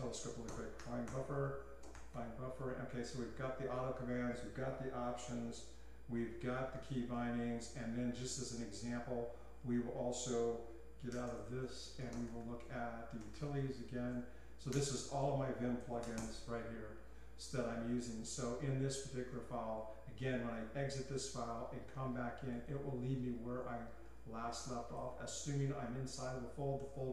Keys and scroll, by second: 0.8-2.6 typing, 11.4 Escape, 11.6 Escape, 12.1-16.4 typing, 17.8-18.6 typing.